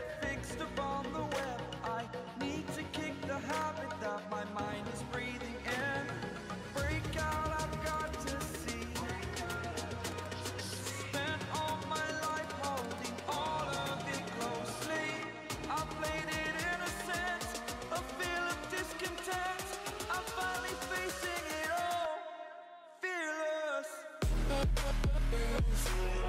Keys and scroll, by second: 3.8 Up, 3.9 Up, 4.5 Up, 4.5 ctrl+t, 5.2 ctrl+t, 8.1 ctrl+t, 11.6 ctrl+t, 18.1 ctrl+t, 20.8 ctrl+t, 25.6 ctrl+t.